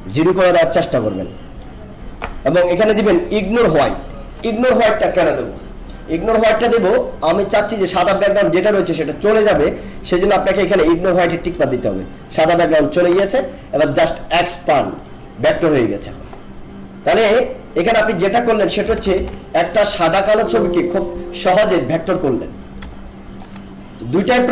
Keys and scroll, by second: 18.8 ctrl+-, 20.2 alt+space.